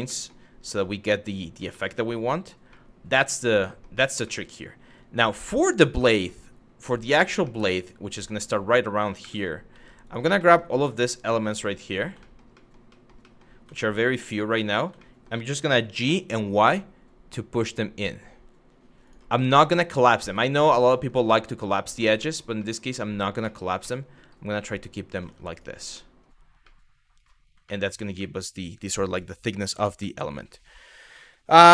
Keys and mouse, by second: 0.5 middle click, 1.5 shift+middle click, 2.3 middle click, 3.3 shift+middle click, 3.9 middle click, 5.0 middle click, 5.7 shift+middle click, 7.2 middle click, 7.9 click, 8.8 2, 9.7 click, 10.1 shift+middle click, 10.6 shift+middle click, 11.0 shift+middle click, 11.5 shift+click, 11.9 shift+middle click, 12.3 shift+middle click, 12.5 shift+middle click, 13.0 shift+middle click, 13.4 shift+middle click, 14.0 middle click, 14.7 shift+middle click, 15.5 g, 15.9 y, 18.7 click, 19.0 middle click, 19.6 shift+middle click, 20.1 shift+middle click, 20.6 middle click, 20.9 shift+middle click, 21.5 shift+middle click, 21.9 shift+middle click, 22.3 shift+middle click, 22.7 shift+middle click, 23.2 shift+middle click, 23.5 middle click, 24.3 middle click, 24.9 Tab, 25.6 middle drag, 26.4-26.8 middle drag, 27.4 middle click, 27.8-28.2 shift+middle drag, 29.8 middle drag.